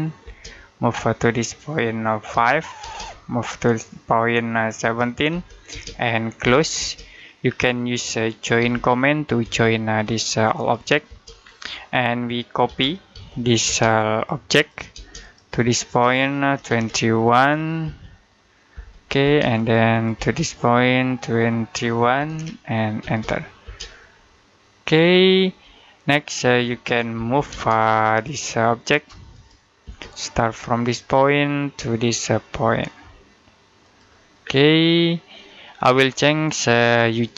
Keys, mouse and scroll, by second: 0.1 space, 2.2 5, 2.6 space, 4.7 1, 5.5 space, 6.3 c, 6.6 space, 8.4 j, 9.3 space, 9.9 click, 10.9 space, 11.2 scroll down 1, 11.3 middle click, 12.5-13.5 typing, 14.0 click, 14.8 space, 15.0 click, 16.4 typing, 17.7 space, 19.4 click, 20.0 space, 20.2 click, 22.0-22.8 typing, 24.1 middle click, 24.8-25.6 scroll up 1, 25.6 middle click, 27.0-27.3 typing, 27.9 click, 29.7 space, 30.7 click, 33.7 click, 34.2-34.7 scroll down 1, 34.7 middle click, 35.9-36.8 scroll up 1, 36.8 middle click.